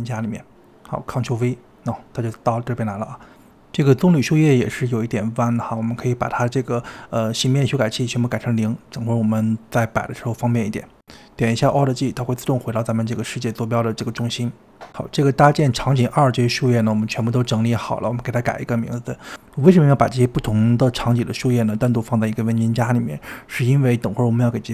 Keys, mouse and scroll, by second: 0.4 click, 1.4 ctrl+v, 4.0 click, 6.2-6.7 middle drag, 6.7 scroll down 2, 6.9 middle click, 7.4 click, 8.4-9.8 middle drag, 9.8 click, 10.4 scroll down 2, 10.6 KP_7, 11.0-11.5 scroll down 4, 11.5-13.0 shift+middle drag, 13.0 alt+g, 13.7-14.6 middle drag, 14.6-15.5 scroll up 5, 15.5-18.0 middle drag, 18.0 drag, 19.9 click, 22.4 click, 22.6-24.7 drag.